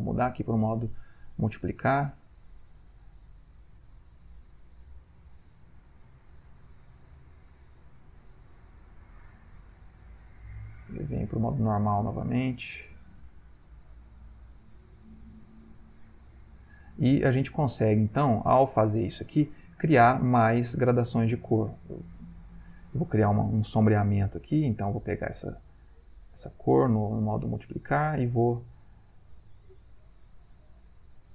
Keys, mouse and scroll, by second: 2.3 shift+click, 3.3 shift+click, 4.3 click, 5.3-6.9 drag, 10.7-13.0 drag, 13.6-16.9 ctrl+drag, 16.9-19.7 ctrl+middle drag, 19.7 ctrl+click, 20.3-22.6 middle drag, 22.6 click, 26.1-31.3 shift+drag.